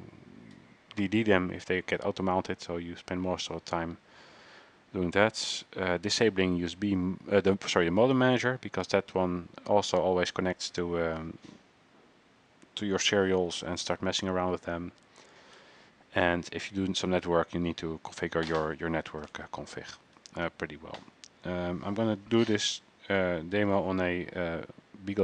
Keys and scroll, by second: 19.5-20.3 typing, 20.5 ctrl+c.